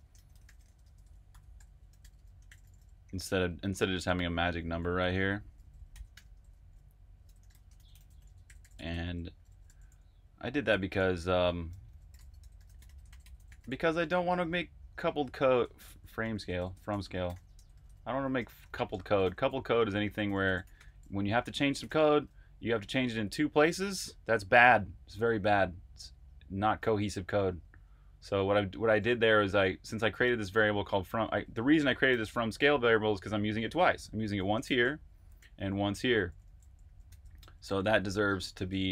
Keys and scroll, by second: 0.0-9.3 typing, 10.4-13.8 typing, 15.3-17.3 typing, 20.2-22.2 typing, 27.5 Escape, 29.0-30.5 typing, 32.0-37.3 typing, 38.6 Escape, 38.8-38.9 typing.